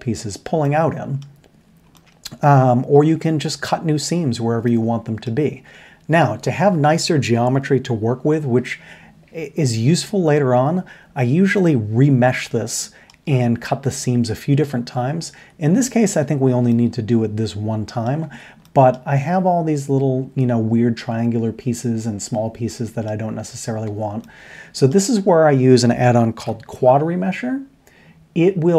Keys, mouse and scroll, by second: 16.0 Tab, 16.7-17.8 middle drag, 18.1 middle click, 18.2 Tab, 23.8 Tab, 24.2-24.9 middle drag, 26.4 n.